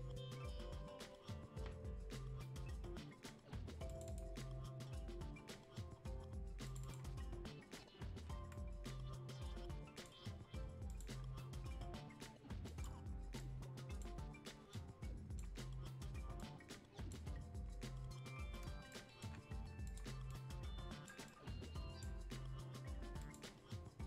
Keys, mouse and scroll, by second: 3.9 click, 6.6-15.6 drag, 15.6-15.9 scroll down 1, 15.9-16.4 scroll up 1, 16.4-17.9 drag, 17.9-18.7 scroll down 1, 18.9 alt+click, 19.9 click, 21.3-23.2 drag, 23.2 click.